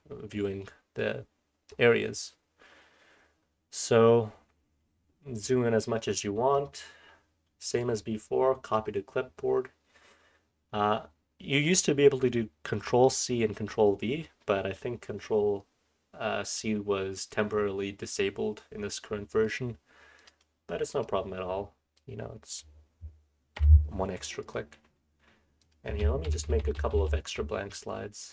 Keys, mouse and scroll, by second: 0.9-1.7 drag, 2.9-4.2 scroll down 1, 4.2-6.5 scroll up 1, 6.5 drag, 6.5-7.6 scroll up 1, 7.6 click, 7.6-8.1 scroll up 1, 17.3-17.9 drag, 17.3-17.9 scroll up 1.